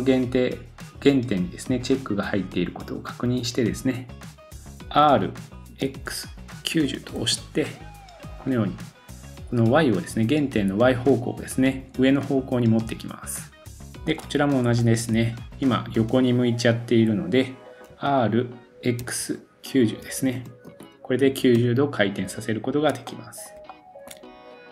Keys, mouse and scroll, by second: 5.0 r, 8.6-14.1 middle drag, 13.4-14.0 scroll down 4, 14.3-14.8 scroll up 1, 14.8 click, 16.7 scroll up 1, 17.9 r, 22.4-23.1 scroll down 2, 23.6-24.7 shift+middle drag, 24.3-24.7 scroll down 1.